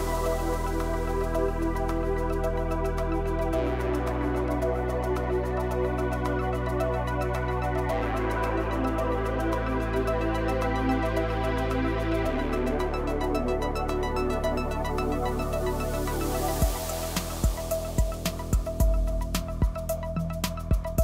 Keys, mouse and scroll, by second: 0.0 click, 0.4 middle drag, 0.7-2.3 scroll up 2, 2.3 shift+a, 2.7 s, 3.7 middle click, 4.1-4.6 scroll down 1, 4.6 click, 5.0-7.4 middle drag, 7.4 click, 7.7 KP_1, 8.0 KP_3, 8.4-9.3 scroll up 6, 9.3 click, 10.0 Tab, 11.0 click, 12.6 s, 15.1-15.8 middle drag, 15.8 KP_3, 16.6 g, 18.3 a, 18.5 a, 19.2-20.9 middle drag, 20.9 ctrl+z.